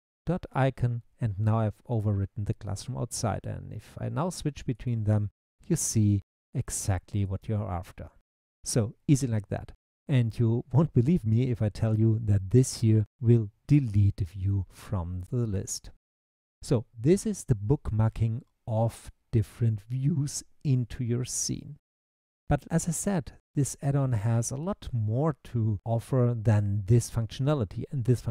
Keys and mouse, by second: 3.8 click, 4.8 click, 5.9 click, 7.1 click.